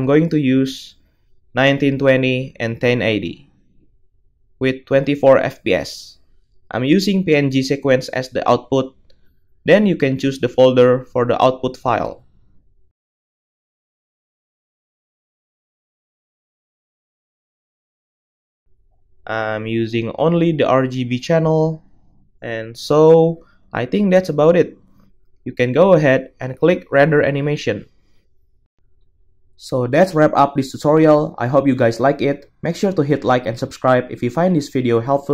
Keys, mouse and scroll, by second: 8.4-21.0 drag, 21.0-25.6 middle drag, 25.6-35.3 drag.